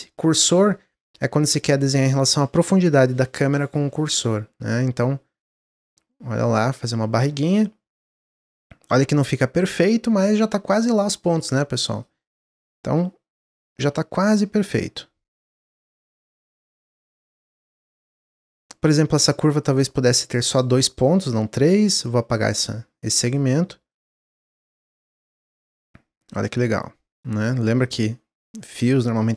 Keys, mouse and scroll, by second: 0.7-3.8 middle drag, 4.6-7.2 drag, 7.2-10.3 middle drag, 11.2 click, 12.1 middle click, 12.8-14.5 drag, 14.6 click, 15.5 click, 16.3 click, 17.5 click, 18.7 click, 19.7 middle click, 20.4 click, 20.9 middle click, 21.9 x, 23.1 click, 23.8 click, 24.9-26.1 middle drag, 26.1 click, 27.7 click, 28.4 click, 29.2-29.3 middle drag.